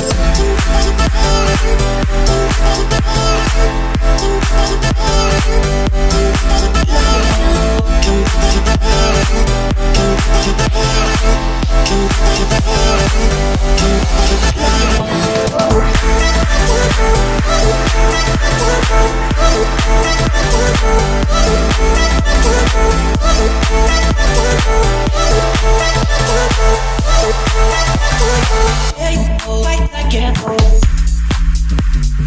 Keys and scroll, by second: 1.6 2, 2.1 Return, 5.4 Escape, 7.2 Return, 9.5 2, 9.9 Return, 12.3 Escape, 13.5 Escape, 14.1 o, 24.7 Escape, 29.2 Return, 29.5 Escape.